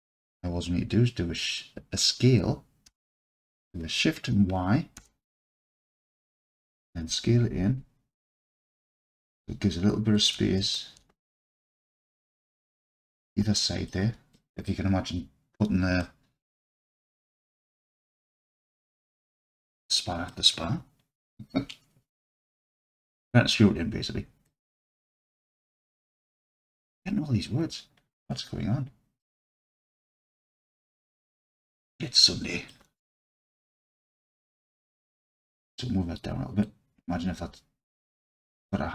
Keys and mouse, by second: 2.9 s, 5.0 shift+y, 10.2 shift+click, 10.7 alt+click, 11.7 alt+z, 13.7 alt+click, 14.5 click, 16.0-16.6 alt+drag, 16.9-17.3 middle drag, 19.6-20.3 alt+drag, 24.5-27.0 alt+drag, 30.1 Tab, 30.9-32.7 alt+drag, 33.7-34.5 alt+drag, 34.9-38.2 drag.